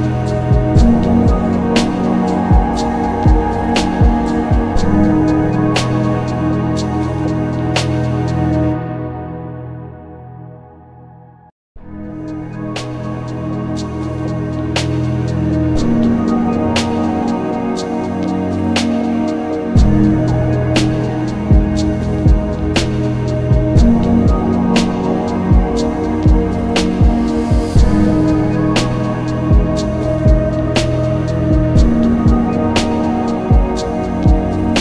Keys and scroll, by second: 3.6 ctrl+z, 4.9 ctrl+z, 18.6 b, 18.8 m, 18.9 v, 19.7 s.